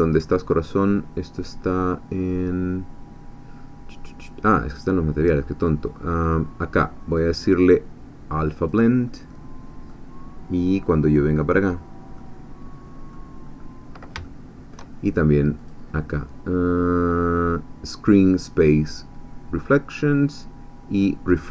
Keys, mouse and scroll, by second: 4.7 click, 5.6-6.6 scroll down 4, 7.1 click, 8.6 click, 9.9-11.6 middle drag, 11.7 scroll down 2, 12.1-13.4 middle drag, 13.4-13.8 scroll up 2, 14.2 shift+middle click, 15.6 click, 18.3 click, 19.6 click, 21.3 click.